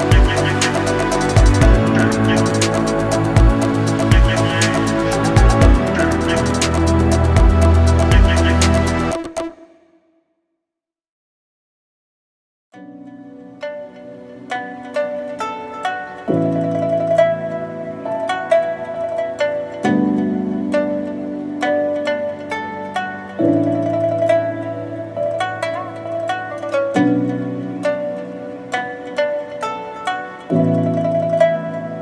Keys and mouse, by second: 0.0 ctrl+right click, 0.3 ctrl+e, 1.0-2.9 typing, 3.2 right click, 3.9 ctrl+l, 4.3 h, 4.8 2, 5.3 shift+middle click, 5.7 middle click, 8.8 click, 9.4 ctrl+click, 10.2 ctrl+click, 10.8 ctrl+click, 11.5 ctrl+e, 12.4 right click, 13.1 ctrl+right click, 14.4 shift+middle click, 14.8 middle click, 15.6 click, 16.2 ctrl+click, 17.2 ctrl+click, 17.8 shift+middle click, 18.3 ctrl+click, 18.5 ctrl+e, 19.0 a, 19.4 a, 19.6 u, 19.9 a, 21.7 alt+h, 22.2 Tab, 22.9 Tab, 23.1 a, 23.6 a, 23.9 u, 24.2 a, 24.7 Tab, 26.2 h, 26.7 shift+middle click, 27.1 right click, 28.2 Tab, 28.8 shift+middle click, 30.2 shift+middle click, 30.6 middle click, 31.2 click, 31.4 alt+click.